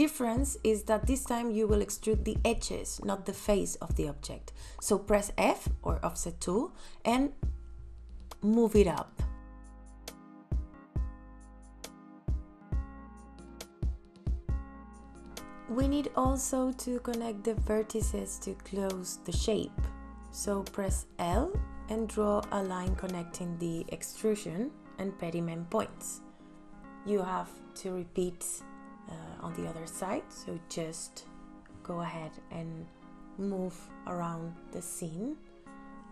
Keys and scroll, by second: 12.8 ,, 13.1 KP_2, 13.6 KP_Enter, 18.4 l.